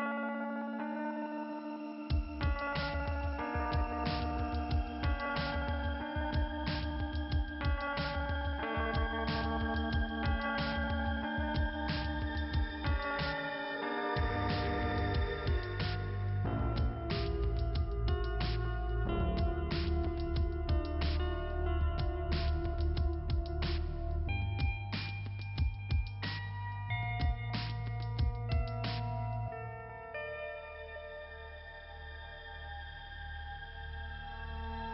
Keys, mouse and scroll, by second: 0.9 click, 2.2 click, 2.3 click, 2.9-4.0 scroll up 1, 4.1 click, 5.2 click, 6.1 scroll up 2, 6.5 scroll down 1, 7.8 click, 10.9 click, 13.7-14.1 scroll down 2, 14.1-14.7 scroll up 3, 16.8-17.3 scroll up 1, 17.3-18.0 scroll down 1, 19.4 middle click, 21.6 scroll down 2, 21.8 scroll up 1, 24.9 middle click, 25.5 middle click, 27.7-28.3 scroll down 1, 31.1 click, 32.5 click.